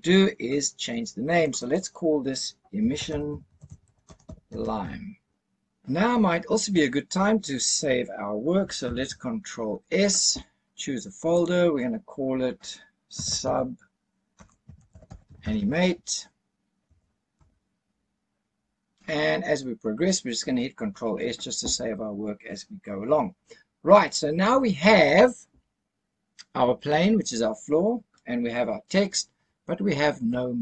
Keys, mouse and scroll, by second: 1.4 click, 1.5-5.3 drag, 3.3 s, 9.0 ctrl+s, 19.8-20.5 scroll up 2, 20.5-20.9 scroll down 1, 21.0-22.9 scroll down 1.